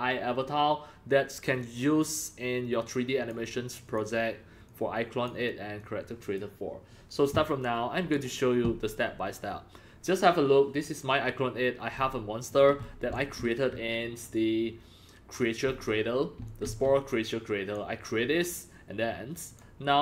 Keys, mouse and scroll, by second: 2.0-3.3 drag, 3.9 click, 4.7 click, 5.8 click, 8.1 click, 11.8 click, 12.0-12.5 scroll up 5, 12.5-13.1 scroll down 6, 13.1-13.4 typing, 13.1-15.3 drag, 15.7 scroll up 7, 16.0-16.5 scroll down 4, 16.4 typing, 16.5-17.7 drag, 19.5 click.